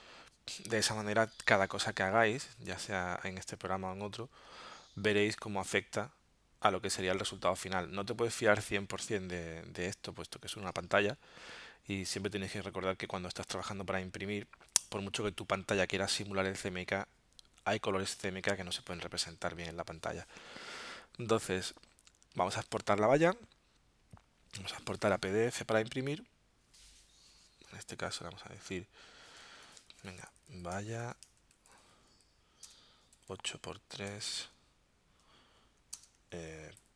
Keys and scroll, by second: 28.6 shift+e, 29.6-34.1 typing, 36.0-36.9 typing.